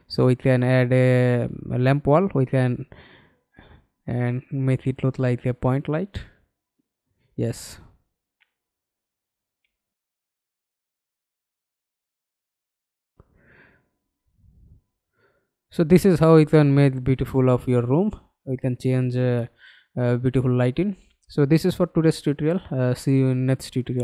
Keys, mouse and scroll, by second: 1.5 w, 6.8 f, 7.5 scroll down 2, 8.0 alt+click, 15.3-15.8 scroll down 3, 16.0 alt+middle click, 16.8 alt+click, 17.5 alt+middle click, 22.6 alt+F9.